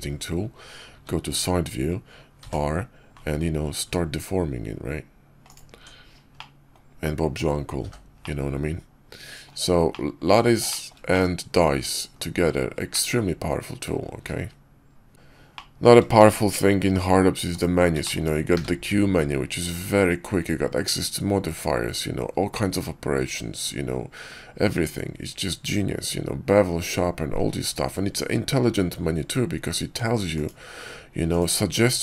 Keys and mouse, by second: 0.8 `, 1.2 KP_5, 2.3 r, 5.6 Tab, 6.3-6.6 drag, 7.7 h, 8.1-9.3 drag, 9.8-10.3 drag, 10.6 shift+drag, 11.0-11.4 drag, 11.4-11.7 middle drag, 12.0 KP_5, 12.8-13.8 middle drag, 14.1 q, 15.4 middle drag, 16.0 shift+a, 17.9 shift+click, 18.4 q.